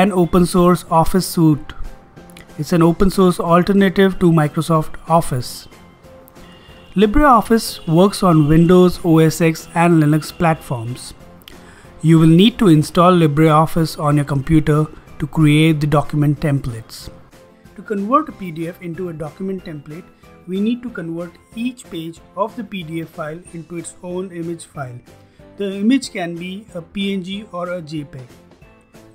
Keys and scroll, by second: 0.0-0.3 typing.